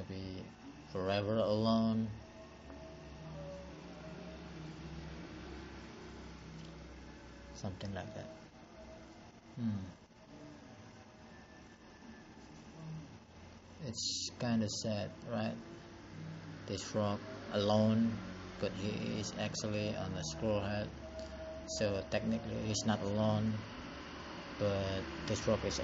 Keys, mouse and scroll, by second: 6.5 click, 8.6 click, 9.7 click, 13.7 ctrl+z, 23.7 click, 25.4 click.